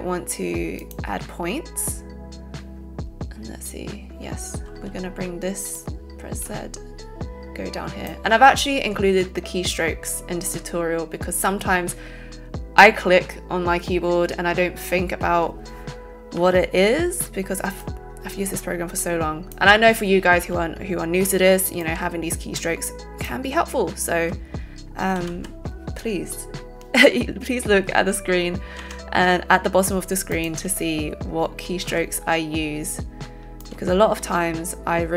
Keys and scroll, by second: 4.7 z, 16.4 c, 25.1 ctrl+z, 28.8 x, 31.9 z.